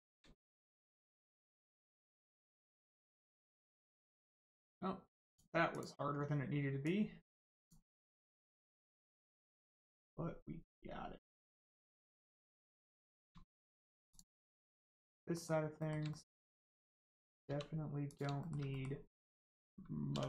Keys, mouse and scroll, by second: 0.5 shift+middle click, 1.1 middle click, 1.2 middle click, 2.0-2.4 scroll down 1, 4.5 click, 6.8 click, 8.0 middle click, 9.5 scroll up 1, 9.8 middle click, 11.8 scroll down 1, 12.1 middle click, 12.6 shift+middle click, 13.0 middle click, 13.0 scroll down 1, 13.4 shift+middle click, 13.7 middle click, 14.1 click, 14.3 middle click, 16.1 shift+middle click, 17.4 middle click, 18.0 click, 18.3 shift+middle click, 18.7 middle click, 18.7 middle click, 20.1 2.